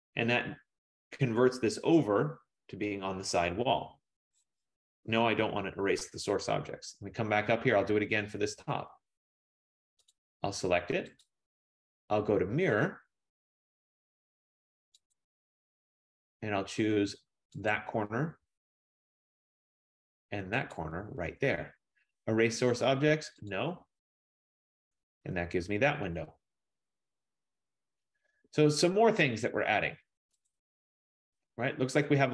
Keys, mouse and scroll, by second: 5.1 Return, 6.5-8.0 scroll, 8.0-8.9 scroll, 8.9 scroll, 10.2 click, 11.4 click, 15.3 click, 17.7 click, 20.9 click, 23.5 click, 24.7-25.8 scroll, 30.7 click.